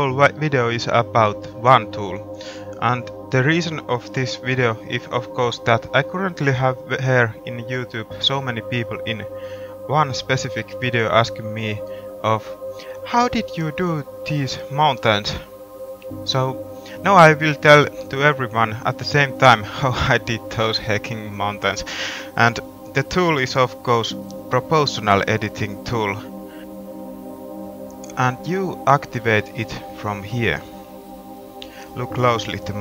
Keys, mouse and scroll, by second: 6.0 middle click, 7.7 middle click, 9.0 middle click, 9.9 middle click, 12.2 middle click, 12.3-14.6 middle drag, 14.7 middle click, 21.3 middle click, 22.2-26.7 middle drag, 30.7-32.8 drag.